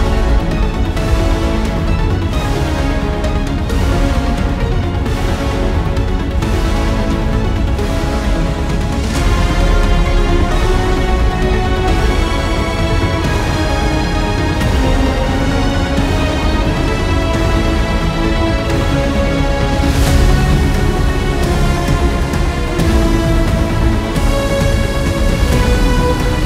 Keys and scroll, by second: 0.0-13.6 typing, 2.4 ctrl+l, 17.7-21.2 typing, 25.4-26.4 typing.